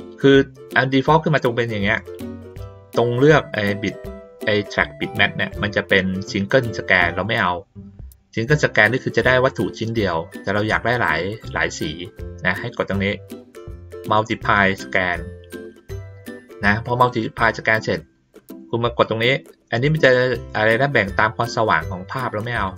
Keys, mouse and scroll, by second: 1.3-1.8 drag, 14.8 click, 22.5 click.